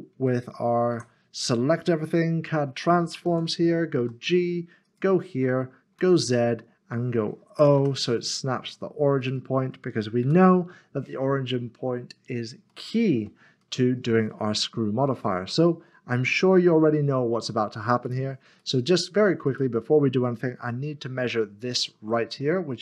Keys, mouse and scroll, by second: 0.9 a, 3.2 a, 4.0 g, 4.8 click, 7.8 typing, 9.2 click, 10.8 ., 11.6 middle click, 12.1 scroll down 1, 18.1 click, 18.6 middle click, 19.5 click, 20.6 g, 21.6 g.